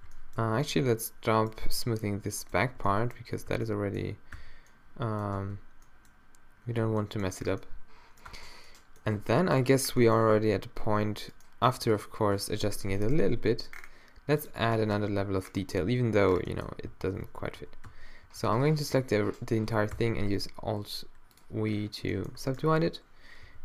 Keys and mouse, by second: 0.0 z, 0.4 z, 1.6 b, 2.7 z, 3.5 b, 4.4 q, 5.3 Tab, 8.3 Tab, 9.2 a, 11.3 middle click, 12.7 o, 13.3 g, 15.0 Tab, 16.2 a, 16.9 a, 17.2 Tab, 17.6 a, 17.9 a, 19.9 alt+w, 22.3 middle click, 22.6 middle click, 23.5 t.